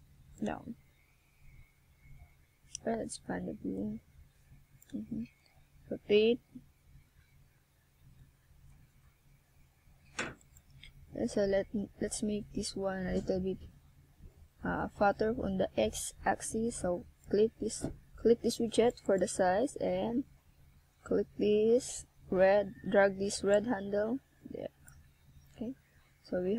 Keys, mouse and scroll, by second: 1.2 a, 5.9 ctrl+r, 11.6 ctrl+r, 14.9 click, 16.2 ctrl+r, 18.4 click, 20.0 ctrl+r, 23.2 click, 24.8 ctrl+r.